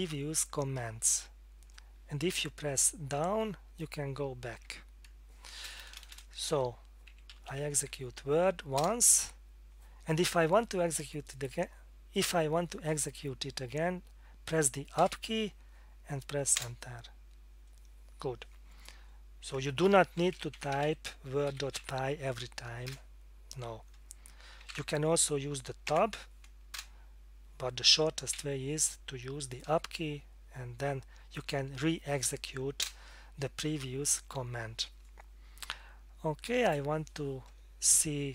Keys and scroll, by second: 0.8 Up, 3.4 Down, 4.5 Down, 5.6-8.0 typing, 8.8 Return, 16.6 Return, 19.9-22.3 typing, 22.9 Return, 24.4-25.1 typing, 25.9 Tab, 26.7 Return, 28.3 Up, 32.8 Return, 37.9 BackSpace.